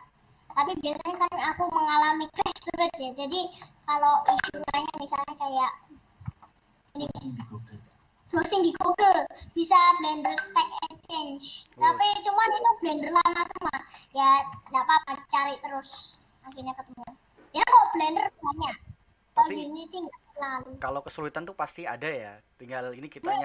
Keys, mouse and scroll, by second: 0.0 scroll up 4, 0.0 middle click, 0.9 scroll down 1, 1.2 middle click, 1.8 scroll up 1, 3.3 middle click, 3.7 scroll up 1, 4.2 middle click, 4.8-5.4 scroll up 1, 5.4 scroll down 2, 5.7 middle click, 6.0 scroll down 1, 6.3 middle click, 6.9 click, 7.3-9.5 middle drag, 9.5 scroll up 1, 9.7-12.9 middle drag, 14.1-14.6 scroll down 2, 14.6-16.2 shift+middle drag, 16.2-16.9 scroll up 1, 16.9-23.4 shift+middle drag.